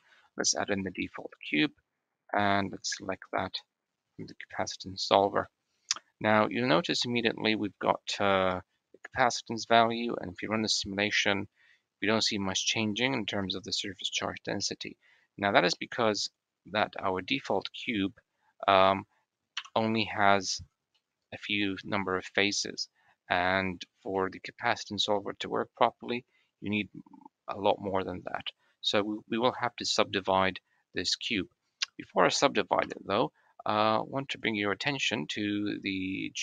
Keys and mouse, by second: 2.3 click, 5.3-7.5 middle drag, 12.0 middle click, 13.2-13.8 middle drag, 14.4-14.9 middle drag, 15.6 middle drag, 16.0 middle click, 17.3 click, 19.4-20.4 middle drag, 20.4 Tab, 20.8 click, 21.6 middle click, 21.7 click, 22.3 click, 23.2 click, 23.4 middle click, 24.0 shift+middle click, 28.1-29.6 middle drag, 31.6 Tab, 36.1-36.4 drag.